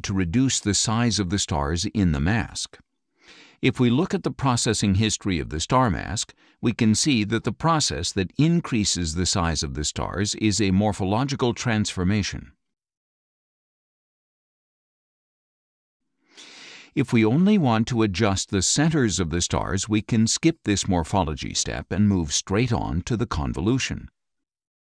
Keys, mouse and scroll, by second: 3.2 click, 5.4 click, 8.1 click, 11.0 click, 12.6 click, 14.0 click, 15.4 click, 20.5 click, 23.3 click.